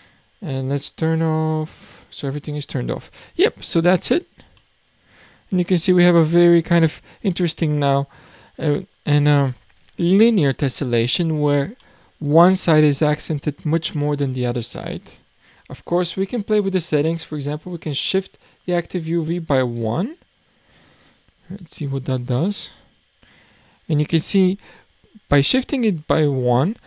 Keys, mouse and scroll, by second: 2.9-3.8 middle drag, 3.8-4.6 scroll up 10, 4.6 middle click, 5.1-5.9 scroll down 12, 5.9-8.7 middle drag, 8.7 scroll down 1, 8.9-9.9 scroll up 9, 11.3-11.8 scroll down 6, 11.8-14.8 middle drag, 15.2-19.0 scroll down 12, 19.6-23.2 drag, 23.2 scroll up 9.